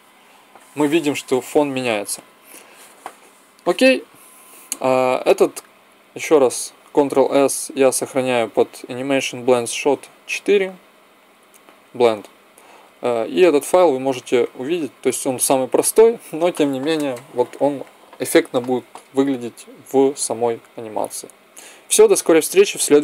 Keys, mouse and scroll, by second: 3.5-6.9 drag, 4.5 Escape, 6.9 ctrl+s, 13.6 ctrl+s.